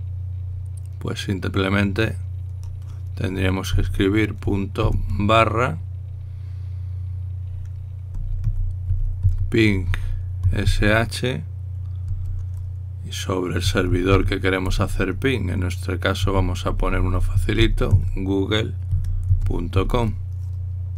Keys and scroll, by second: 4.5-5.5 typing, 8.7-11.9 typing, 14.3-15.5 typing, 16.6-20.9 typing.